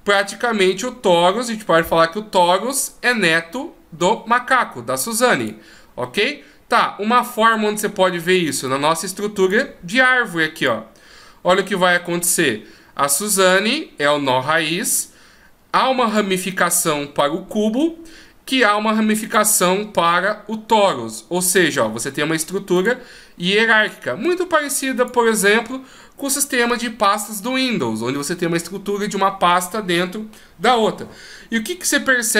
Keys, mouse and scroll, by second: 5.0 click, 8.7 click, 11.4-13.4 scroll down 1, 13.4 click, 19.2 click.